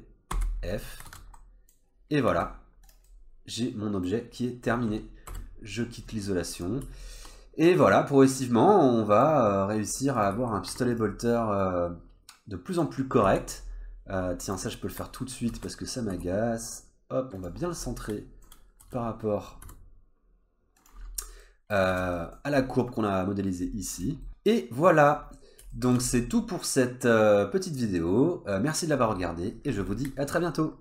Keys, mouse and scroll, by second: 0.3 f, 1.1 alt+z, 1.4 middle click, 1.8-2.3 scroll down 2, 2.3 Tab, 2.9 click, 3.1 scroll down 1, 3.1 middle click, 5.3 /, 5.8 scroll down 1, 6.3 middle click, 6.7 scroll down 1, 7.0 shift+middle click, 7.4 middle click, 9.8-10.2 scroll up 2, 10.2 click, 10.3 Tab, 10.7 3, 10.9 click, 11.6 click, 13.0 scroll down 2, 13.3 Tab, 13.6-14.2 scroll up 2, 14.2 scroll up 1, 14.5 click, 14.7 middle click, 15.5 alt+z, 15.7-16.1 scroll up 2, 16.1 g, 17.6 scroll down 2, 17.9 middle click, 18.8 s, 21.3 scroll down 1, 21.4 middle click, 21.9 alt+z, 22.2 middle click, 22.5-23.6 scroll up 1, 23.6 scroll down 2, 24.0 click, 24.2 middle click, 25.2 scroll down 1, 25.7 shift+middle click, 26.1 middle click, 28.5 middle click.